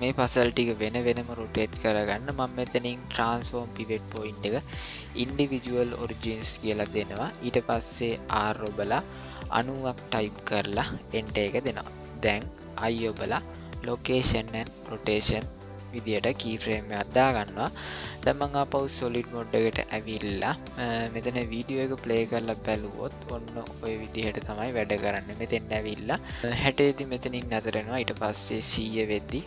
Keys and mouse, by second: 3.2-5.3 drag, 8.2 r, 12.8 i, 18.9 click, 19.5-20.2 middle drag, 20.4-20.9 shift+middle drag, 23.1-29.4 drag.